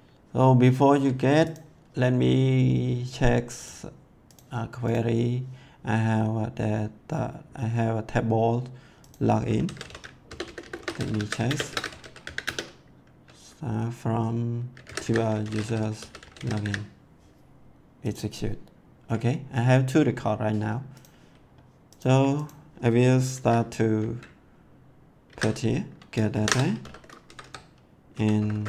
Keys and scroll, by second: 9.3-12.7 typing, 14.6-17.1 typing, 25.2 ctrl+v, 26.3 shift+9, 26.8 ;, 27.2 Left, 28.3 shift+'.